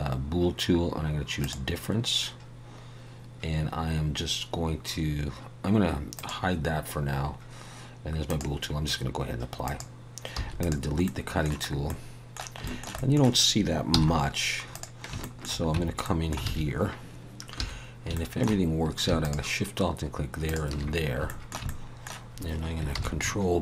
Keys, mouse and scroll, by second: 6.2 click, 7.1-7.9 scroll down 1, 8.3 click, 8.3-9.2 scroll down 1, 10.3 x, 11.0 middle click, 11.7 scroll up 1, 11.9 middle click, 12.6 shift+middle click, 13.0 middle click, 13.9 n, 14.2-14.8 scroll up 2, 14.7 click, 15.2 shift+middle click, 15.7 Tab, 16.0 middle click, 16.5 alt+a, 17.1 scroll up 2, 17.6 2, 17.8 scroll up 1, 18.1 shift+middle click, 19.2 alt+shift+click, 21.3 shift+middle click, 21.7 middle click, 22.9 ctrl+b.